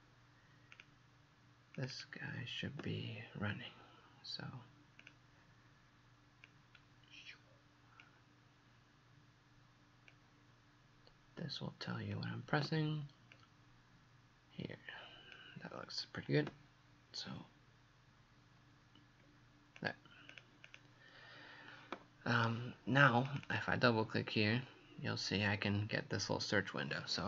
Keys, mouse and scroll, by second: 19.8 click, 20.3 click, 23.3 click, 23.5 click.